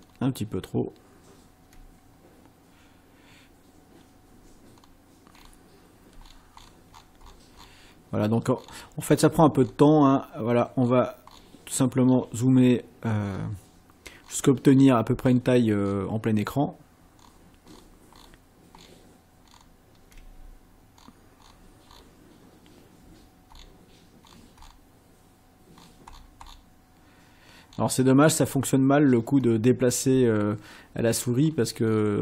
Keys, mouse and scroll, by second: 0.0 ctrl+scroll down 2, 4.8-5.1 scroll down 2, 5.4 scroll down 2, 6.2-6.8 ctrl+scroll down 4, 7.6 ctrl+scroll down 2, 8.6-8.9 ctrl+scroll down 2, 9.1 ctrl+scroll down 2, 9.6-10.4 ctrl+scroll down 4, 10.8-11.6 ctrl+scroll down 4, 12.1-13.6 ctrl+scroll down 6, 14.3-15.6 ctrl+scroll down 6, 15.9-16.2 ctrl+scroll down 2, 17.2-18.4 ctrl+scroll down 6, 18.8 ctrl+scroll down 2, 19.4-19.8 ctrl+scroll down 2, 21.0-22.2 ctrl+scroll down 6, 23.5 ctrl+scroll down 2, 24.2-24.9 ctrl+scroll down 4, 25.8-26.7 ctrl+scroll down 6, 27.7 ctrl+scroll down 2, 28.4-28.7 ctrl+scroll down 2, 31.4-32.2 ctrl+scroll down 4.